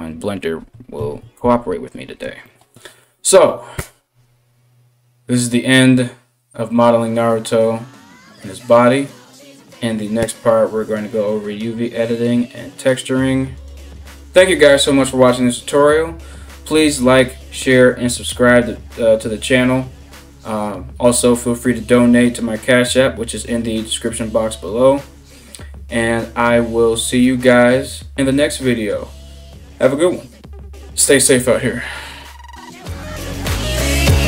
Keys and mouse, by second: 0.6 ctrl+s.